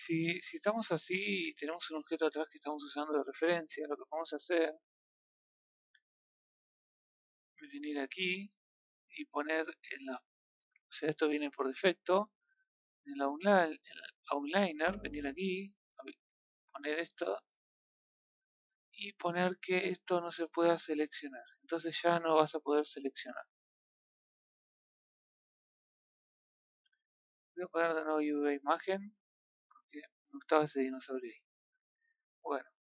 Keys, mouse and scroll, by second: 0.6 scroll down 1, 0.8-1.3 middle drag, 1.3 a, 1.7 click, 7.2-12.5 drag, 18.4 click, 20.4 click, 21.3-22.5 scroll up 1, 32.0-32.7 middle drag, 32.7 scroll up 1.